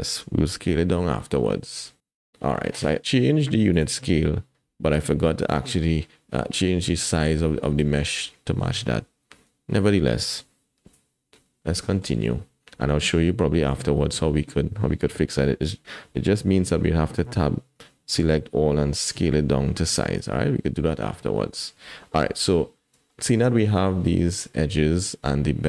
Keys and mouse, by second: 0.7 n, 3.7 click, 11.9 click, 17.2 Tab, 18.2 a, 19.0 s, 20.2 Tab, 20.6 click, 22.2 KP_1, 23.1 shift+click, 23.4 click.